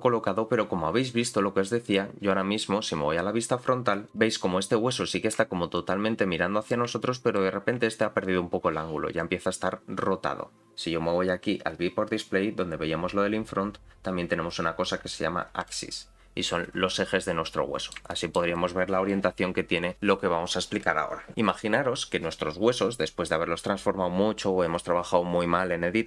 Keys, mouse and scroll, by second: 1.9 click, 1.9 scroll down 3, 4.1 click, 4.7 scroll up 3, 5.1 shift+middle click, 5.7-6.8 drag, 7.0 shift+middle click, 8.2-9.3 drag, 15.6 click, 16.3-16.9 scroll down 1, 16.9 middle click, 16.9 scroll down 3, 18.1 shift+middle click, 18.5 middle click, 23.6 click.